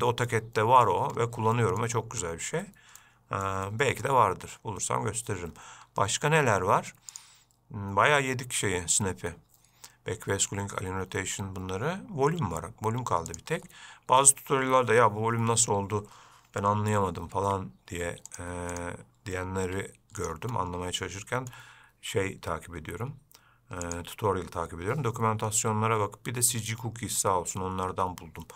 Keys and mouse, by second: 0.6-1.1 middle drag, 1.8 shift+middle click, 3.3-3.7 middle drag, 4.0-4.3 shift+middle drag, 7.4-14.1 drag, 17.7 x, 19.0 click, 19.9 x, 21.3-21.8 shift+middle drag, 24.1 click.